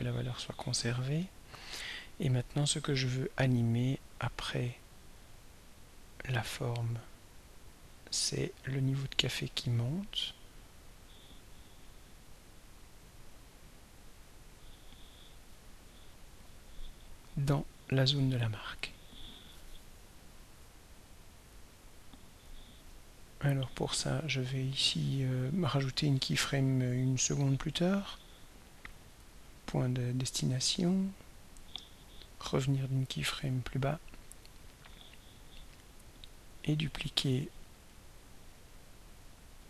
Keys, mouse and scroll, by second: 1.7 click, 4.5-21.8 drag, 25.5 click, 25.9 click, 27.4 click, 29.0 click, 30.3 click, 31.7 click, 34.5 click, 36.2 click, 37.4 click, 38.4 click.